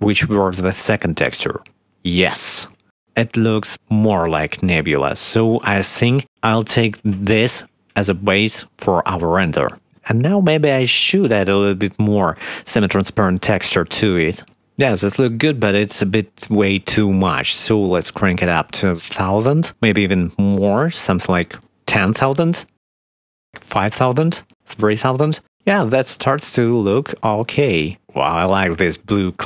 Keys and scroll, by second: 5.1 shift+`, 17.2 1, 17.4 0, 17.6 Return, 20.6 0, 20.7 Return, 23.2 5, 23.4 Return, 24.7 3, 24.9 Return, 25.5 ctrl+s.